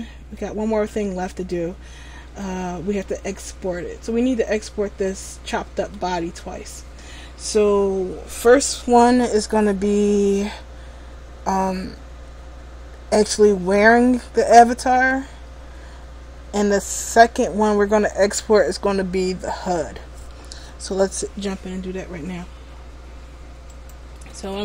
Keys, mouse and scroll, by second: 4.6-5.2 scroll down 1, 5.2 middle click, 23.8 right click.